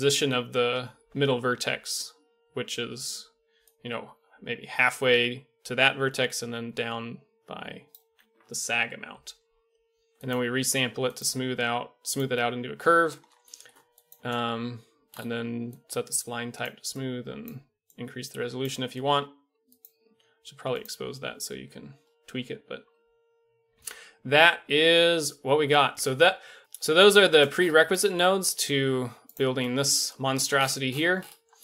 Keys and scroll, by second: 1.7-3.6 d, 7.9 d, 8.0 d, 8.0 d, 23.7 Tab, 26.6 a.